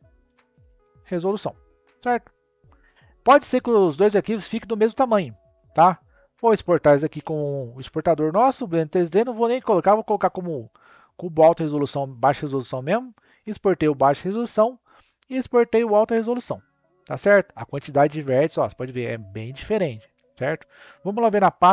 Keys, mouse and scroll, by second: 3.2-4.0 scroll down 2, 4.0-5.0 middle drag, 5.0 click, 7.1 n, 12.2-14.0 drag, 14.9-18.0 drag, 20.5 click.